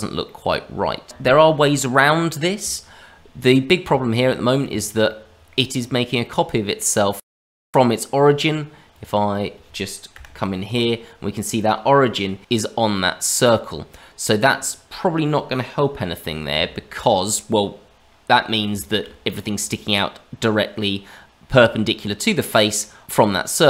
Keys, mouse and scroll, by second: 0.2 middle click, 3.3-3.8 scroll up 1, 3.9 shift+middle click, 5.0 middle click, 6.2 middle click, 7.2 scroll down 2, 7.4 shift+middle click, 8.1 click, 8.9 click, 10.1 KP_Divide, 12.1 click, 13.9-15.4 scroll down 3, 15.4-16.5 scroll down 1, 16.5 KP_Divide, 18.0 scroll down 1, 18.3 middle click, 18.7 shift+middle click, 22.4 middle click, 23.5 middle click.